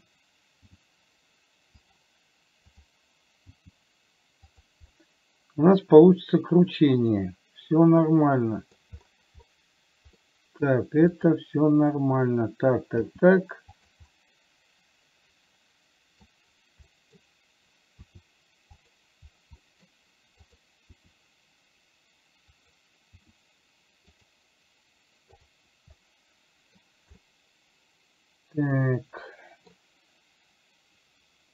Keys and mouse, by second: 0.9 g, 3.1 click, 3.8 g, 5.3-9.1 middle drag, 10.6 middle click, 11.4 click, 13.3 g, 14.4-16.6 middle drag, 17.3 middle click, 18.4 r, 19.9 middle click, 20.8 click, 21.2 r, 26.4 middle click, 27.6-30.1 middle drag.